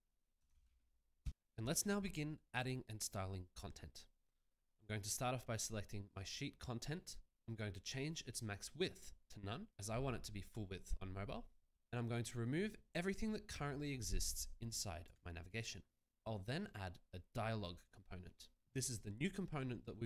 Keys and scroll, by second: 0.9 ctrl+v, 1.2 Return, 15.4 BackSpace.